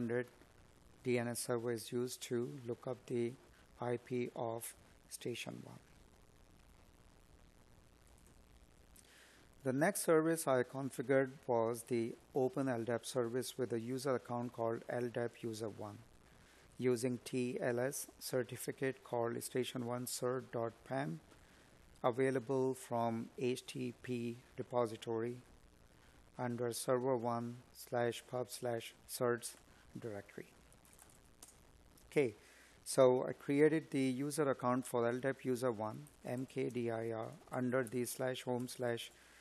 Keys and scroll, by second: 31.5 space, 36.8 space, 37.3 space.